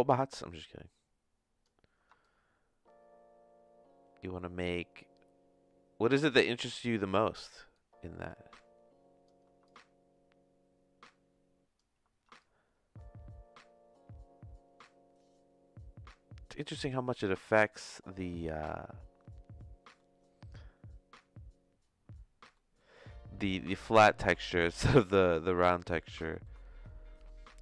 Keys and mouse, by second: 2.2-6.9 shift+drag, 7.7-9.2 shift+drag, 9.7-11.7 shift+drag, 12.5-16.5 shift+drag, 17.7-20.0 shift+middle drag, 22.5 middle click, 23.3 middle click, 24.0 middle click, 24.4 shift+middle click, 25.4 middle click, 26.3 middle click.